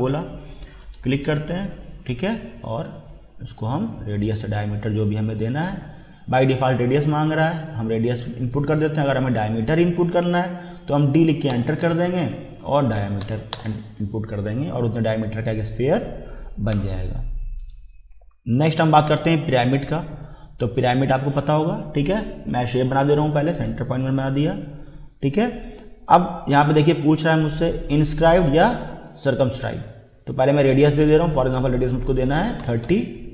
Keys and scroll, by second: 10.7 d, 11.5 Return, 13.0 5, 13.2 0, 13.5 Return, 32.6 3, 32.9 0.